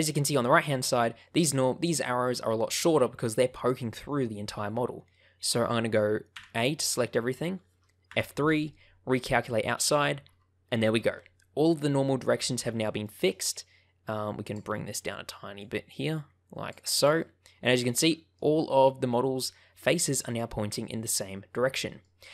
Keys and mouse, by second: 5.0 middle click, 6.2 a, 8.0 F3, 11.7 middle click, 13.0 middle click, 14.4-16.7 drag, 17.1-18.3 middle drag, 18.7 middle click, 20.1-21.9 middle drag.